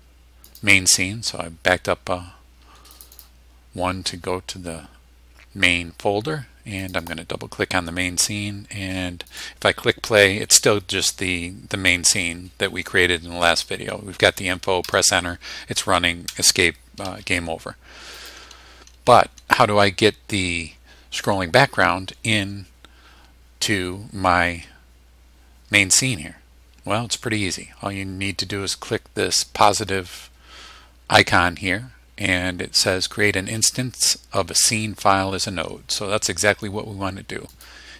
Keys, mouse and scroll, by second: 0.5 click, 3.0 click, 6.8 click, 9.3 click, 14.9 Return, 16.3 Escape, 18.2 click, 37.5 click.